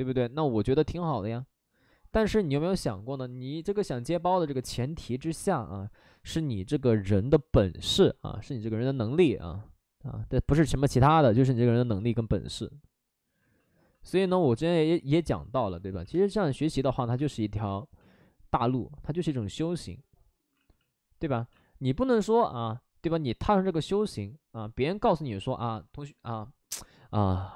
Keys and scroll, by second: 1.9 alt+s, 2.8 shift+e, 3.0 shift+f, 4.3 shift+f, 4.3 shift+e, 5.2 shift+f, 5.2 b, 7.8 shift+f, 9.1 b, 14.6 space, 15.8 x, 16.1 space, 17.6 space, 20.5 ctrl+z, 20.7 ctrl+z, 21.1 ctrl+z.